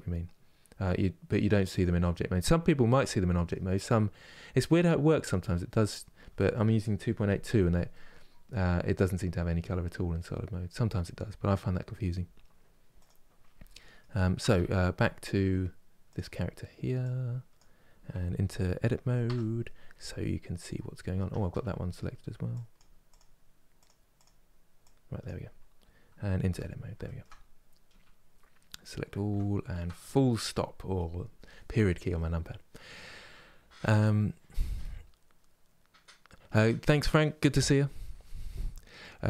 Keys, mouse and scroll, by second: 1.4 click, 2.1-2.6 scroll down 2, 2.6 middle click, 3.4-4.4 scroll down 2, 4.4-12.7 middle drag, 12.7 click, 13.4 middle click, 14.2 Tab, 15.7-17.2 drag, 18.9 Tab, 20.4 middle click, 21.4 Tab, 22.8 click, 26.1 Tab, 26.7-28.9 shift+middle drag, 28.9 a, 29.4 KP_Decimal, 30.0-39.2 middle drag.